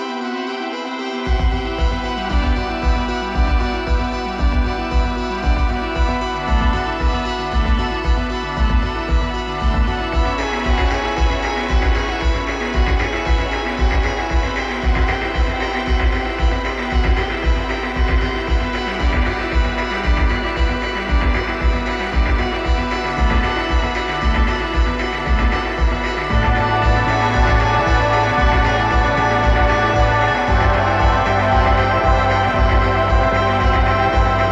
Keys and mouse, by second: 1.1-3.1 drag, 3.8-6.8 drag, 16.2-18.0 drag, 19.8 middle click, 20.7 middle click, 23.3-25.2 right drag, 25.7-27.2 drag, 27.2 right click, 28.7 ctrl+KP_3.